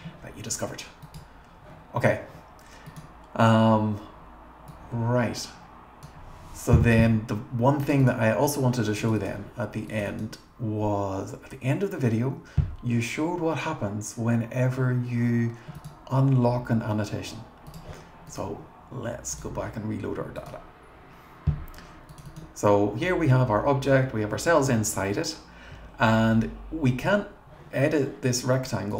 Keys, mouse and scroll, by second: 2.9 click, 4.7-6.1 drag, 7.8 click, 8.0 click, 9.0 click, 9.2 click, 9.9 click, 10.1 click, 15.8 right click, 17.7 click, 20.4 click, 22.1 click, 22.3 click, 28.9 click.